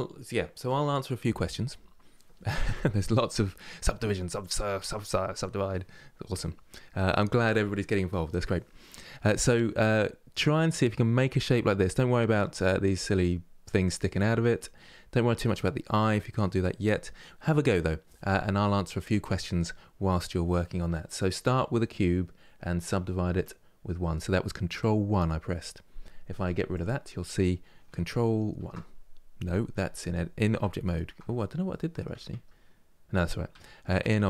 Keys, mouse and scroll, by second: 9.4-16.9 middle drag, 20.8-24.8 middle drag, 26.4-28.2 drag, 28.2 ctrl+1, 29.4 Tab, 31.4 middle click, 32.0 Tab, 33.2 Tab.